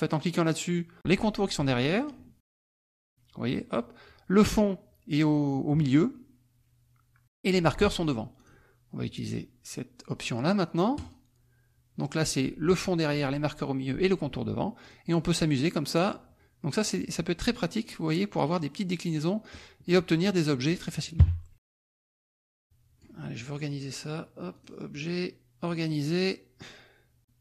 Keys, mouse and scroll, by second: 2.7 click, 8.4 click, 10.9 click, 14.8 click, 15.9 click, 16.7 click, 17.7 click, 18.4 click, 19.4 click, 19.9 middle click, 21.2 KP_Subtract, 22.1-23.2 drag, 24.5 click, 25.6 click.